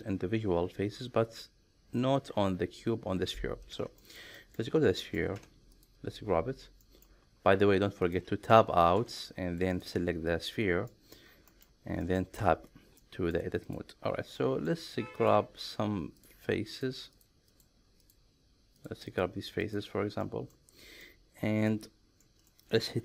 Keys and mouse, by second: 4.0 middle click, 4.4 shift+middle click, 5.0 middle click, 5.3 Tab, 6.8 middle click, 8.0 click, 9.0 Tab, 9.8 click, 10.9 middle click, 11.5 shift+middle click, 12.0 middle click, 12.4 Tab, 13.0 middle click, 13.6 click, 14.4 middle click, 16.2 shift+click, 16.7 shift+click, 17.1 shift+click, 17.6 shift+click, 18.0 shift+click, 19.0 shift+click, 20.2 middle click, 21.0 middle click, 22.2 middle click.